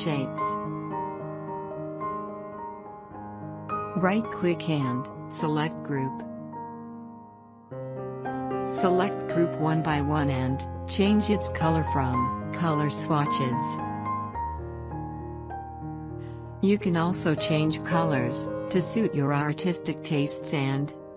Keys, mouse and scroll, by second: 3.0 right click, 4.0 click, 6.6 click, 19.9-21.1 drag.